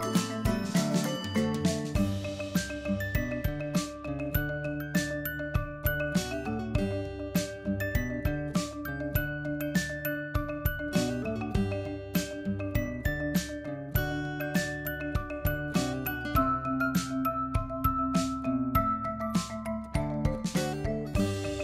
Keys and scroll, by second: 21.0 ctrl+g.